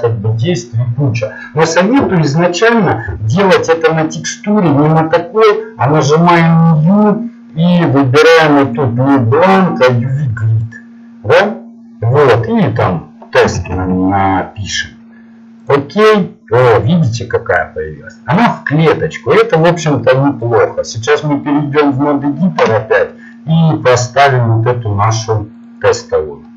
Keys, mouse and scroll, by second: 4.5 click, 10.4 click, 24.6-25.7 drag.